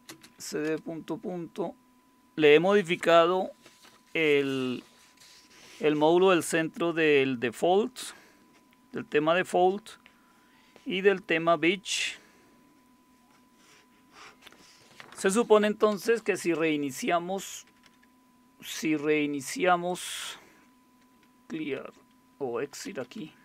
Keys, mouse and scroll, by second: 0.0-0.9 typing, 17.7 BackSpace, 17.8 BackSpace, 19.9 click, 22.6-23.4 typing.